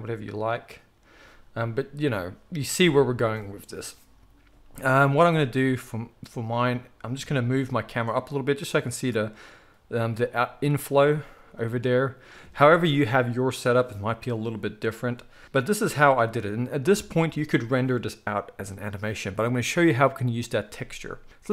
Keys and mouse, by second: 5.2 z, 6.5 click, 6.5-21.5 middle drag, 7.5 g, 9.8 g, 10.9 z, 15.8 z.